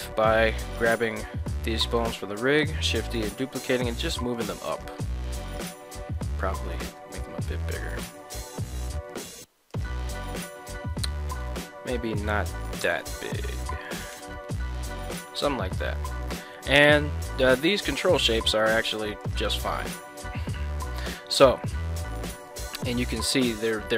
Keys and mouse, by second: 2.6 shift+d, 3.0 z, 4.7 click, 6.6 g, 7.0 z, 7.1 x, 7.9 z, 9.7 click, 10.1 Tab, 11.4 Tab, 12.7 g, 13.0 z, 13.9 click, 14.2 Tab, 15.5-18.5 middle drag, 19.4 right click, 19.7-20.3 middle drag, 21.0 KP_1, 22.1 shift+middle drag, 23.0 middle drag.